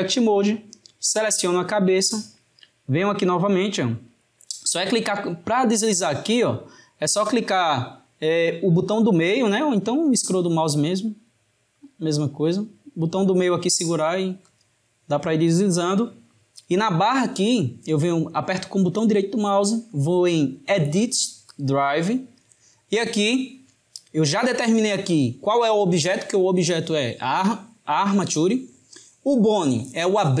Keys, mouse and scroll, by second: 2.9-8.8 middle drag, 9.0-10.8 middle drag, 10.8-11.8 scroll down 3, 11.8-13.0 scroll down 1, 13.0-13.3 scroll down 1, 13.3-18.3 middle drag, 19.2-22.2 right drag.